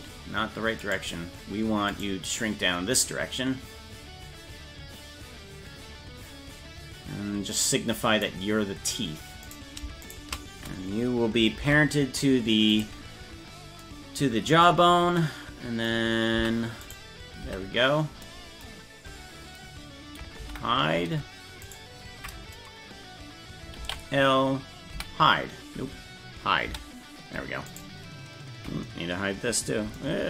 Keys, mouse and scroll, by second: 0.9 right click, 2.0 right click, 3.0-8.3 drag, 9.5 right click, 10.1 shift+right click, 11.6 ctrl+p, 16.4 Tab, 16.9 right click, 17.4 Tab, 20.4 alt+h, 21.6 right click, 23.8 ctrl+l, 24.9 j, 26.7 h, 27.7 right click.